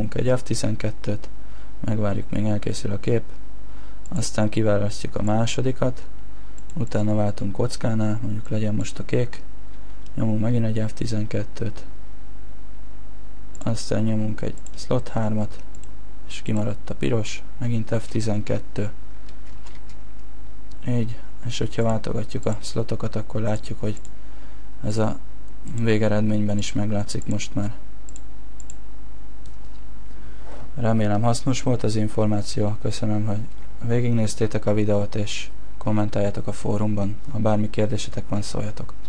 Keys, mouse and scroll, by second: 5.6 click, 14.8 click.